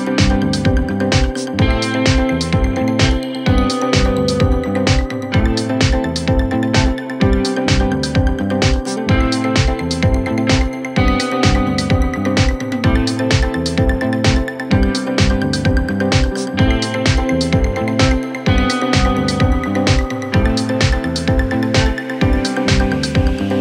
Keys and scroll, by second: 5.7 shift+Page_Up, 11.7 g, 23.4 F3.